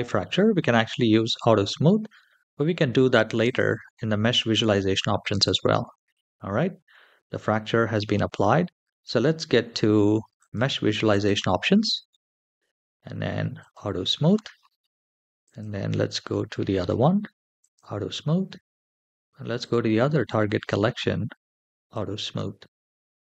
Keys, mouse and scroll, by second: 3.2 click, 10.2 click, 10.9 click, 11.9-13.4 scroll down 2, 13.4 click, 14.3-15.1 scroll up 2, 15.2 click, 16.1 scroll down 2, 17.4 click, 18.0-19.2 scroll up 3, 19.2 scroll up 1, 19.4 click, 20.0-21.5 scroll down 3, 21.5 scroll down 1, 21.6 click, 23.1-23.3 scroll up 3.